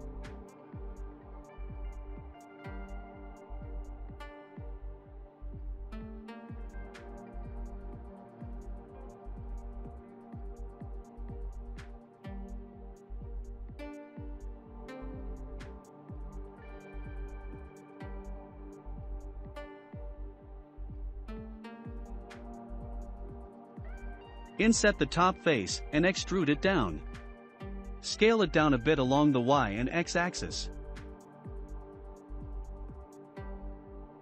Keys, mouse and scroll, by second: 0.0 click, 1.6-2.9 middle drag, 2.9 Tab, 3.5 middle click, 4.4-6.3 drag, 6.3-7.4 shift+middle drag, 7.4 scroll up 1, 8.2 click, 10.2 s, 12.2 2, 12.5 click, 12.6 click, 13.1 middle click, 13.6 s, 16.1-16.9 scroll up 2, 17.3 click, 17.5 click, 18.1 shift+middle click, 18.9 shift+click, 19.1 shift+click, 19.5-22.1 shift+middle drag, 22.1 3, 22.4-24.3 drag, 27.7 e, 31.0-31.7 scroll down 5, 31.7-33.2 shift+middle drag, 33.2 scroll up 1, 33.6 Tab.